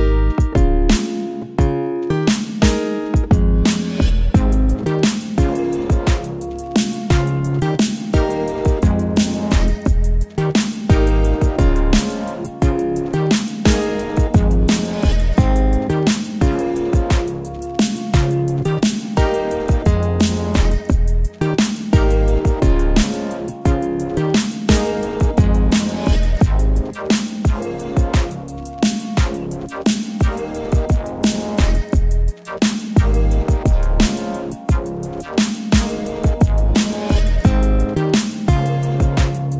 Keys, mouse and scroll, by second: 1.9-7.9 drag, 12.3 click, 13.6-14.4 typing, 18.2 click, 22.4 click, 25.2 click, 34.0 click, 35.4 click, 35.5 click, 37.1-38.7 typing.